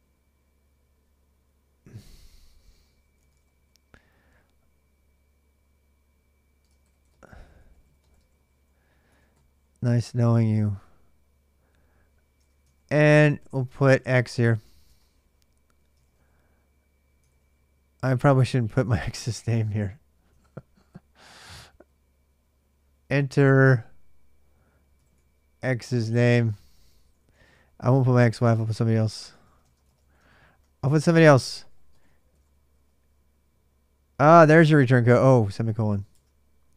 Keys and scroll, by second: 1.3 space, 2.7-3.6 typing, 6.2-8.9 typing, 9.9-10.8 typing, 12.2-15.9 typing, 15.4 Return, 15.7 ctrl+[, 15.8 ctrl+j, 17.0 ctrl+[, 17.1 ctrl+j, 17.2 k, 18.0 ctrl+[, 18.1 ctrl+j, 18.2 k, 18.4 k, 20.1 ctrl+[, 20.1-22.9 typing, 20.2 ctrl+j, 24.5-33.0 typing, 35.1 ctrl+[, 35.1-36.7 typing.